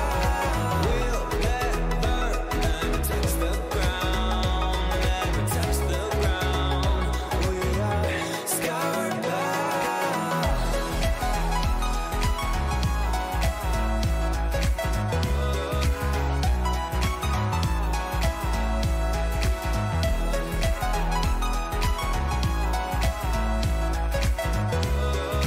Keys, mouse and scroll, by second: 1.5 e, 3.7-5.1 middle drag, 5.7 a, 6.4-8.6 middle drag, 8.7-10.2 middle drag, 11.6-13.9 right drag, 15.7-17.5 drag, 21.8-24.5 middle drag.